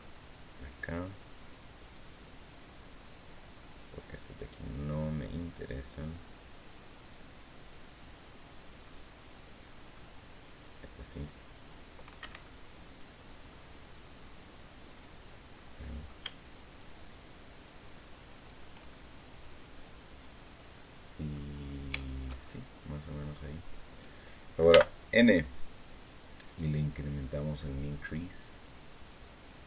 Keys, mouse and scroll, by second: 10.8 click, 11.3 click, 11.9 Escape, 12.2-13.4 middle drag, 14.6 click, 15.3 middle click, 16.4 shift+right click, 18.1 shift+right click, 18.7-21.3 shift+drag, 21.4 scroll down 2, 21.7-23.0 shift+drag, 24.4 n, 26.3-29.6 drag.